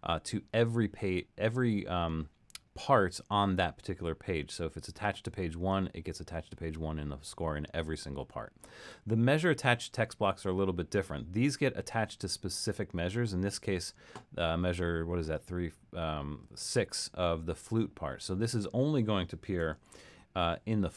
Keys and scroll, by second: 19.7 alt+super+..